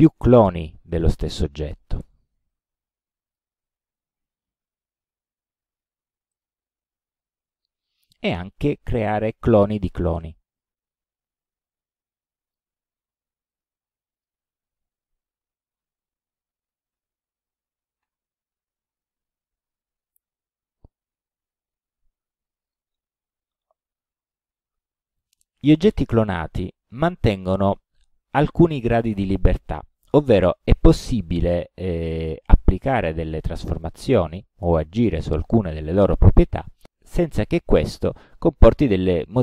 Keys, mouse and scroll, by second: 2.0 alt+d, 2.6 alt+click, 6.4 alt+click, 6.8 alt+d, 7.3-8.4 alt+drag, 11.4 alt+d, 11.8 alt+click, 13.4 alt+d, 13.7-14.5 alt+drag, 15.9 shift+d, 17.0 shift+d, 18.1 shift+d, 22.7 click.